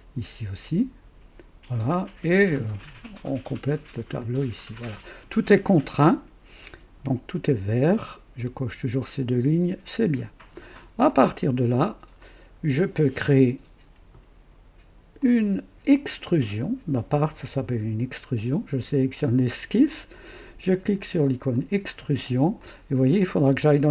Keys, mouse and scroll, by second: 0.6 click, 3.1 click, 4.2 click, 9.9 click, 11.0-12.3 drag, 15.1 click, 16.4 click, 21.2 click, 22.6-23.9 drag.